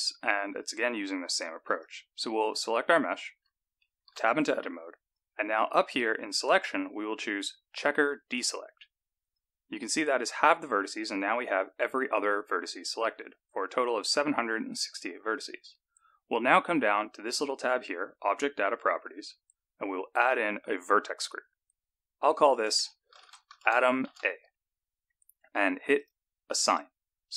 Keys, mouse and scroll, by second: 0.0 click, 1.7 click, 4.2 Tab, 6.3 click, 18.2 click, 20.1 click, 22.2 click, 22.4 click, 26.5 click.